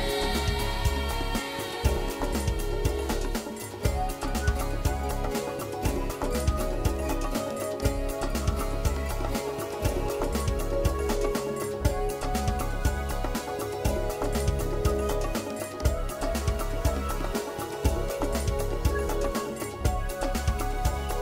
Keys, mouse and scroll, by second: 2.0 r, 5.1 click, 5.2 middle click, 6.5 scroll up 5, 7.0 middle click, 7.7 scroll down 4, 8.9 click, 9.1 middle click, 9.5 Tab, 9.7 middle click, 12.1 shift+middle click, 12.4 scroll down 4, 12.6 middle click, 14.2 g, 15.6 scroll down 1, 15.7 shift+middle click, 16.0 Tab, 16.2 middle click, 16.9 Tab, 17.0 scroll down 1, 17.6 shift+middle click, 18.0 middle click, 19.0 Tab.